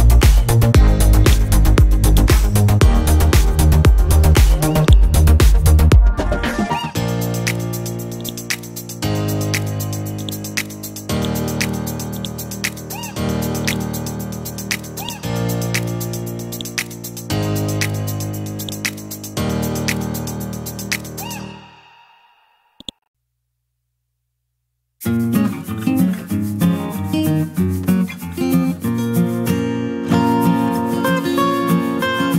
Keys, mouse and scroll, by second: 0.6 c, 1.2 click, 2.9-4.8 scroll up 1, 4.8-5.9 right drag, 8.2 click, 8.9-10.2 scroll down 1, 10.2 click, 11.6-12.2 scroll up 1, 12.2 right click, 13.7 click, 14.2-15.0 scroll down 1, 15.0 right click, 16.5-21.1 drag, 22.8 shift+click, 26.9 Up, 27.4 Up, 27.4 Up.